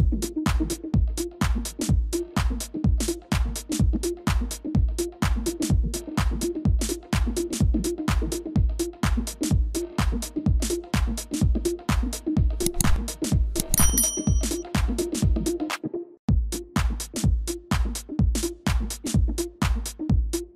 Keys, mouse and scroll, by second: 1.5 shift+click, 3.3 shift+click, 5.3 shift+click, 6.1 shift+click, 7.5 i, 12.4 right click, 16.0 ctrl+c, 16.4 ctrl+f, 18.3 shift+click.